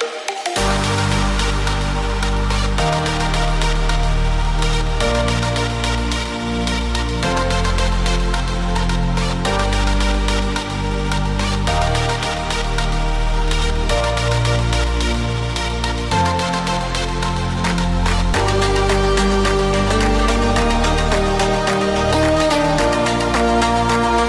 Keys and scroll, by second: 19.5 ctrl+c, 19.7 ctrl+s, 22.2 ctrl+v.